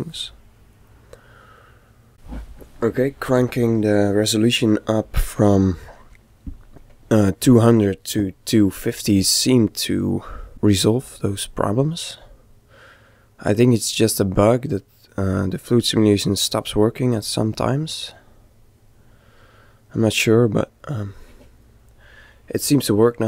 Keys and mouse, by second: 9.7 middle click, 11.5-14.4 middle drag, 16.8-18.6 middle drag.